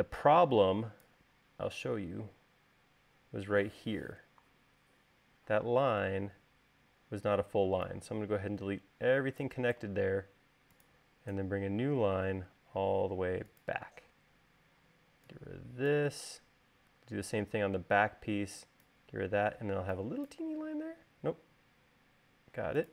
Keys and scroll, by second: 10.6 l, 15.0 e, 20.4 space, 22.2 l.